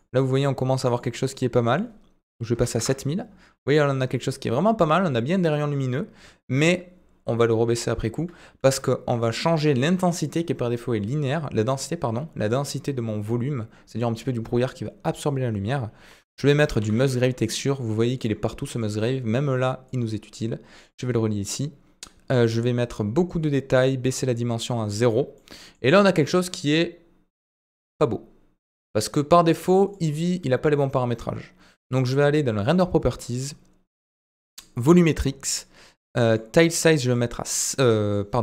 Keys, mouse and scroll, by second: 3.7-4.2 middle drag, 6.6 click, 8.1 middle click, 8.4 shift+a, 9.7 shift+a, 18.4-19.3 typing, 19.9 click, 22.5 click, 24.1 click, 25.4 middle click, 36.4-37.1 drag, 38.1-38.4 drag.